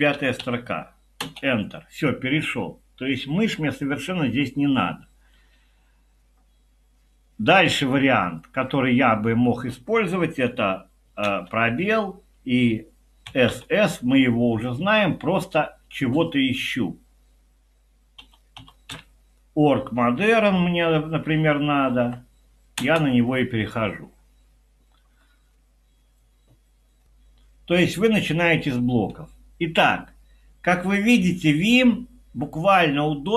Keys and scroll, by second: 0.0-0.9 typing, 1.2 Return, 11.3 space, 13.2 typing, 18.0-19.4 typing, 20.6 Down, 21.3 Up, 21.6-22.3 typing, 22.8 Return.